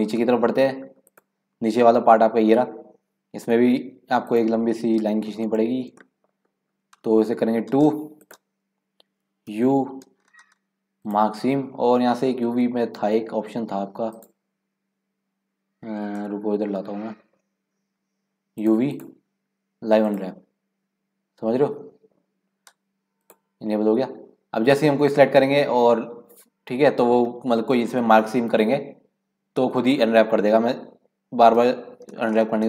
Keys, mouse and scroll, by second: 0.3 shift+middle click, 1.2 click, 4.4 click, 5.4-5.9 scroll down 4, 6.0 shift+middle click, 6.6-7.0 scroll up 1, 7.6 scroll up 3, 7.7 2, 8.2-9.5 drag, 9.5 u, 14.1-16.5 right drag, 16.5 middle click, 16.8 scroll down 2, 17.1-17.8 scroll up 1, 17.8-18.6 scroll up 5, 18.6-22.1 drag, 23.2-26.3 drag, 31.2 a, 31.6 u.